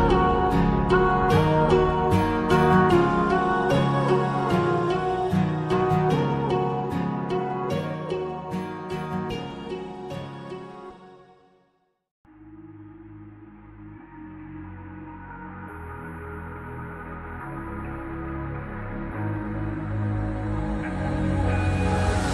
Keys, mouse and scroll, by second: 1.9 ctrl+click, 3.5 scroll down 1, 6.3 click, 7.3 scroll down 1, 7.7-8.4 scroll up 1, 8.4 click, 9.5 ctrl+c, 9.7 ctrl+v, 11.9 click, 15.2 click, 15.3 double click, 16.3 scroll up 1, 16.4 click, 20.1-20.6 scroll up 1, 20.6 scroll down 1.